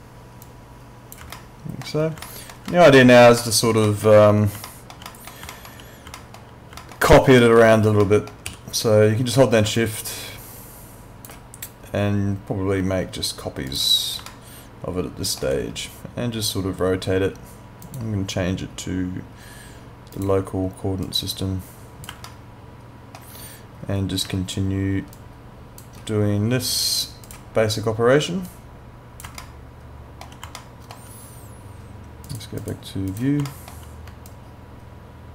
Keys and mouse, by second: 0.4 click, 1.4 alt+middle click, 2.7 middle click, 3.4 alt+middle click, 4.7 alt+middle click, 6.2 alt+middle click, 7.4 alt+middle click, 8.5 e, 9.8 shift+click, 13.7 click, 14.3 alt+middle click, 17.8 click, 22.3 alt+middle click, 25.1 shift+click, 29.4 alt+middle click, 30.6 alt+middle click, 32.3 click, 33.5 alt+middle click, 34.3 shift+click.